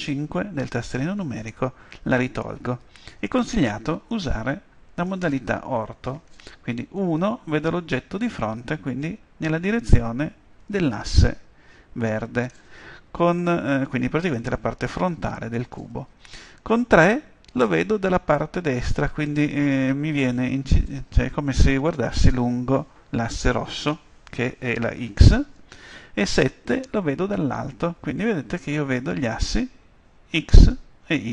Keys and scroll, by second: 17.0 Page_Down, 26.4 Home.